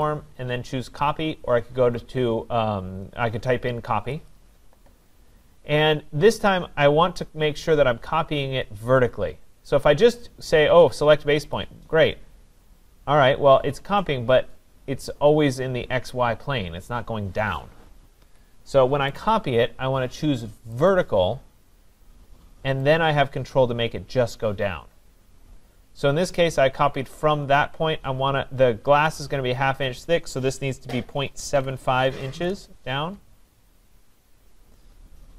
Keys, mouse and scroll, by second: 0.0 click, 4.3 click, 11.6 click, 18.2 Escape, 19.2 right click, 20.9 click, 22.9 click, 31.2-32.7 typing.